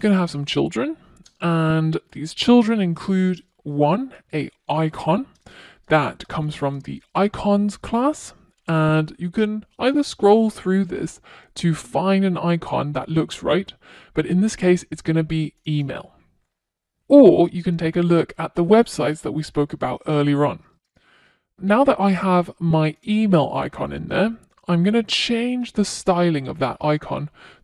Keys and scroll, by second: 3.1 Return, 15.4 super+s, 21.3 super+s, 26.3 Return.